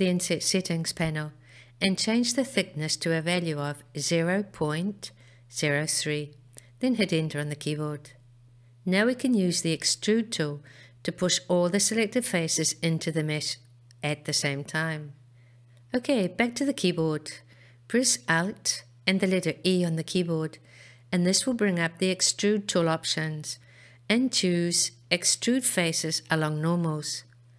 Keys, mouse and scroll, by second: 0.1-6.6 drag, 19.5 alt+e.